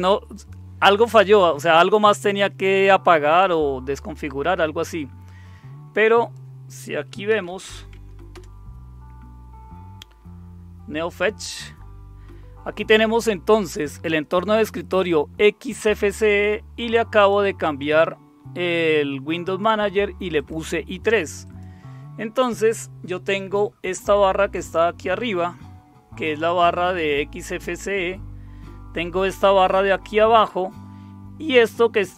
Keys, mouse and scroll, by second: 0.3 click, 6.2 click, 7.1-8.2 typing, 8.3 Return, 14.6-16.2 drag, 17.2 click, 17.8-19.7 drag, 20.4 click, 21.4 click.